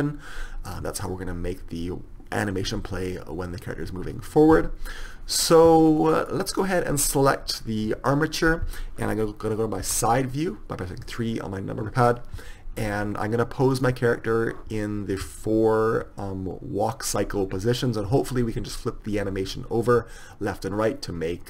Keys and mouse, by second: 10.2 KP_3, 13.0-21.4 right drag.